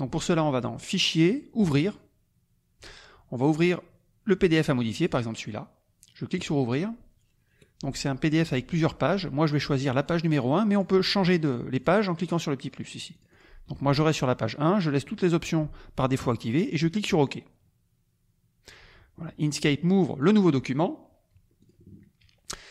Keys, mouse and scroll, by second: 1.3 click, 1.8 click, 4.9 click, 6.3 click, 10.0 click, 10.7 click, 11.2 click, 11.8 click, 12.2 click, 12.9 click, 17.0 click, 20.3 click, 21.6 click.